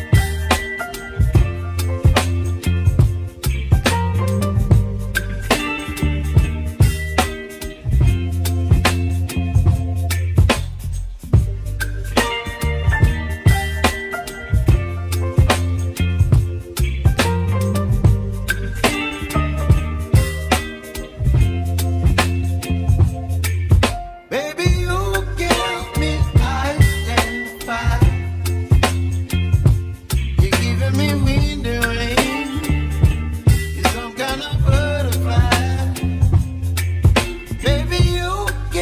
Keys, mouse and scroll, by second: 3.3-5.4 middle drag, 7.3-7.8 scroll up 5, 8.5-8.9 scroll down 3, 9.4 click, 9.9 middle click, 10.4 scroll down 2, 11.2 shift+click, 12.0-13.3 middle drag, 13.3 shift+click, 13.8-16.2 middle drag, 20.2-21.0 scroll down 7, 21.0-22.0 ctrl+drag, 23.1-23.6 scroll up 3, 23.6-24.8 shift+middle drag, 28.4 ctrl+r, 29.6 ctrl+r, 33.6-34.2 scroll down 1, 34.2 Tab, 34.8 Tab, 35.9-36.8 scroll down 1, 36.8 click, 37.2-37.9 scroll down 3, 37.9-38.4 scroll up 4, 38.4-38.8 scroll down 4.